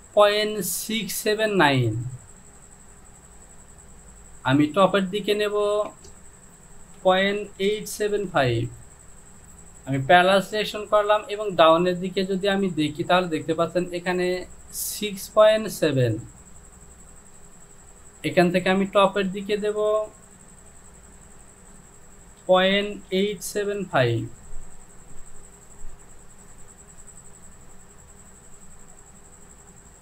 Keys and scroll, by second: 5.8 Down, 7.1 KP_Decimal, 7.6 KP_8, 8.0 KP_7, 8.3 KP_5, 9.4 ctrl+z, 22.4 KP_Decimal, 23.1 KP_8, 23.6 KP_7, 24.0 KP_5, 24.7 Down.